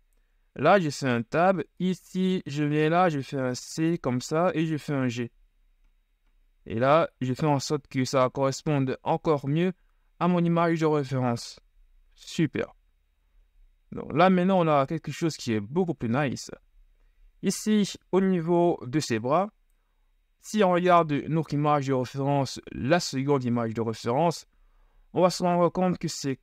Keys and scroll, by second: 0.9 Tab, 3.3 c, 12.4 z.